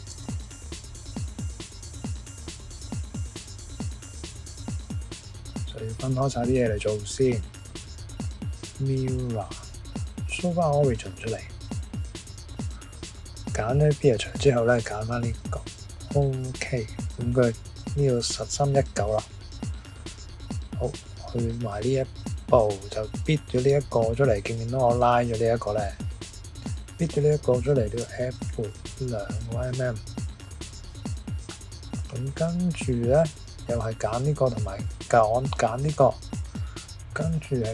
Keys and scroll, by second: 0.1 Return, 28.0-28.4 typing.